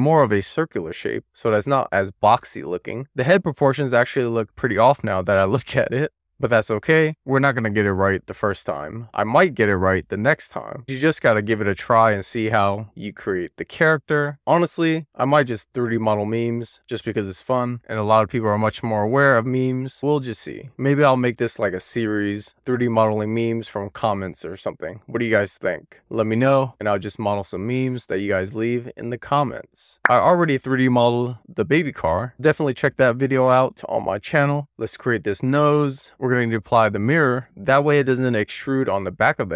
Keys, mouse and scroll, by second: 0.0 click, 0.1 middle click, 0.3 middle click, 0.6 middle click, 1.0 click, 1.8 super+z, 1.8 middle click, 2.6 scroll up 3, 2.8 click, 3.8 1, 3.9-4.2 scroll up 2, 4.2 click, 4.5 click, 5.1 click, 6.4 middle click, 6.5 scroll down 6, 6.7 shift+middle click, 7.1 middle click, 7.6 middle click, 8.1 middle click, 8.4 scroll up 1, 8.8 middle click, 9.1 scroll down 2, 9.1 shift+middle click, 9.5 middle click, 10.0 middle click, 10.3 click, 10.5 super+z, 10.8 1, 10.9 middle click, 11.1 click, 11.3 click, 11.6 middle click, 12.5 scroll down 1, 12.7 click, 12.8 middle click, 13.1 click, 13.2 middle click, 13.6 scroll up 1, 13.8 middle click, 14.2 click, 14.6 middle click, 14.9 alt+middle click, 15.2 scroll up 2, 15.3 middle click, 15.4 scroll down 3, 15.6 middle click, 16.4 middle click, 17.3 alt+shift+click, 17.6 click, 17.7 ctrl+click, 17.9 alt+middle click, 18.1 click, 18.7 middle click, 18.8 scroll down 3, 19.0 middle click, 19.2 scroll up 1, 19.4 click, 19.5 middle click, 19.9 middle click, 20.0 click, 20.1 middle click, 20.8 middle click, 21.1 click, 21.5 click, 22.0 click, 22.2 middle click, 22.9 alt+scroll down 1, 23.1 scroll up 2, 23.7-24.1 scroll down 1, 24.1 click, 25.2 middle click, 25.5 scroll down 2, 25.6 middle click, 25.9 click, 26.1 click, 26.4 middle click, 27.2 click, 27.5 middle click, 27.7 scroll up 2, 27.8 middle click, 28.1 click, 28.4 middle click, 28.8 scroll up 1, 29.1 click, 29.3 click, 29.6 g, 30.3 scroll down 2, 30.4 middle click, 30.8 click, 31.5 g, 32.4 middle click, 32.6 super+z, 32.7 middle click, 33.7 scroll down 2, 34.2-35.0 scroll up 4, 35.3 alt+z, 36.6 click, 37.4-38.7 middle drag, 38.8 click.